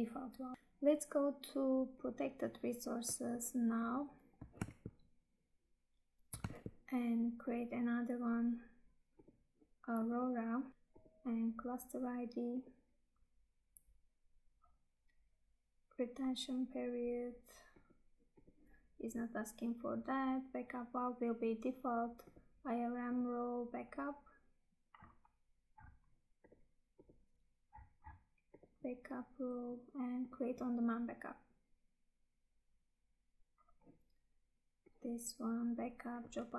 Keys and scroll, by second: 4.8 Tab, 6.6 Tab.